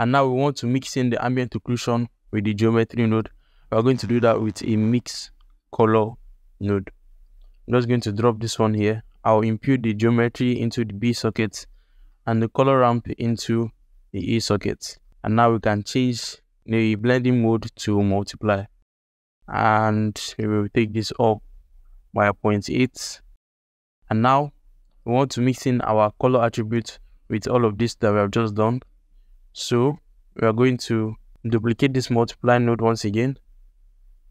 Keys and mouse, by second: 0.2 ctrl+alt+click, 2.6 alt+shift+click, 3.0 click, 3.3 shift+a, 7.6 ctrl+alt+click, 8.2 ctrl+alt+shift+click, 8.5 ctrl+alt+click, 9.3-10.5 drag, 11.1 alt+shift+click, 11.4 ctrl+alt+click, 12.1 alt+middle click, 13.3-14.3 drag, 14.7 ctrl+alt+middle click, 16.9-18.8 drag, 20.3-22.6 drag, 24.1 ctrl+alt+middle click, 25.5-26.5 drag, 27.7 alt+shift+middle click, 28.3-28.9 drag, 29.0 g, 29.8 middle click, 30.6 click, 31.8 shift+d, 33.5 ctrl+alt+middle click.